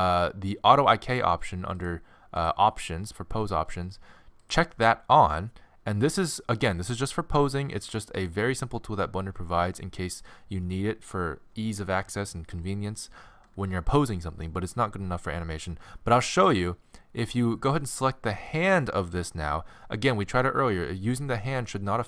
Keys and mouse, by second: 1.8-8.2 drag, 8.2-10.1 right drag, 17.7-22.0 right drag.